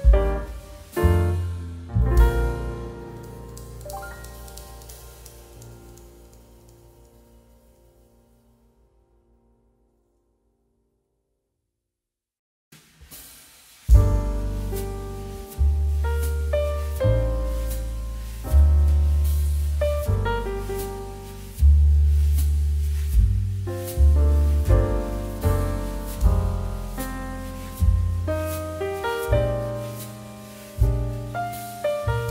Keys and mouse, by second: 0.7 click, 0.9 middle click, 1.1 shift+middle click, 1.5 g, 1.9 click, 2.1 middle click, 2.2 g, 2.4 shift+z, 2.8 click, 3.1 s, 3.6 click, 3.9 middle click, 4.1 s, 5.0 click, 5.2 middle click, 5.5 shift+middle click, 5.7 g, 6.7 click, 6.8 middle click, 7.2 middle click, 7.8 shift+middle click, 8.1 middle click, 8.4 g, 8.6 shift+z, 8.9 click, 9.8 shift+a, 11.0 click, 12.4 middle click, 13.1 shift+middle click, 13.7 shift+click, 17.5 ctrl+z, 18.9 click, 20.9 click, 22.2 shift+click, 22.6 shift+click, 23.1 click, 23.4 middle click, 23.5 s, 24.5 click, 24.7 g, 25.6 click, 25.7 middle click, 26.4 middle click, 26.7 shift+middle click, 27.3 shift+middle click, 27.7 click, 28.1 s, 29.4 click, 29.7 middle click, 30.0 shift+middle click, 30.6 middle click, 31.0 click, 32.1 shift+middle click.